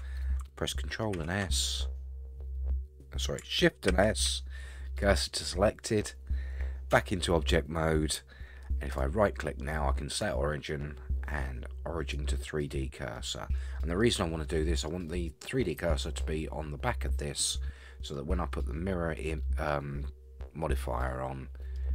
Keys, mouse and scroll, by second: 1.2 ctrl+s, 3.9 shift+s, 6.9 Tab, 8.9-12.3 right drag, 13.1-14.0 middle drag, 14.4 middle click, 15.1-15.8 middle drag, 17.6-18.1 middle drag, 19.1 scroll down 1, 19.2-19.7 middle drag, 21.1-21.8 middle drag.